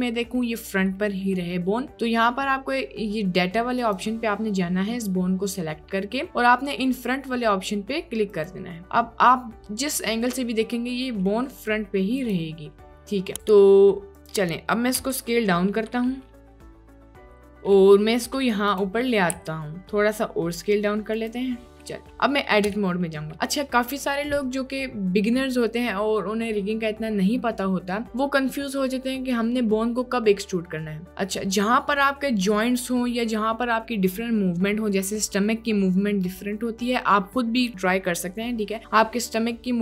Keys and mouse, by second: 0.4 middle click, 1.0-1.3 middle drag, 8.3 click, 8.9-11.3 middle drag, 12.3-13.4 drag, 13.4 a, 15.1 s, 17.4 g, 17.4 z, 19.4 s, 22.7 Tab.